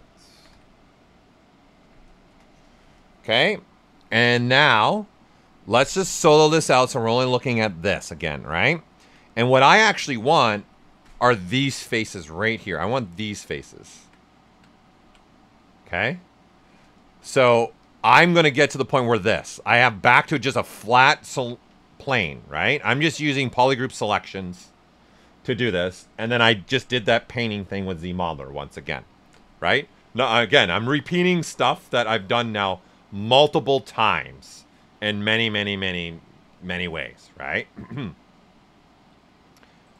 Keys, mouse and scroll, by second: 0.0-2.3 typing, 5.9 click, 6.4 alt+right click, 6.9 ctrl+right click, 7.8 shift+f, 8.2 right click, 8.8 alt+right click, 9.3 right click, 10.5 ctrl+shift+click, 12.2-17.8 alt+drag, 18.2-21.3 ctrl+right drag, 21.3 alt+right click, 29.0 alt+right click, 32.0 click, 39.8 click.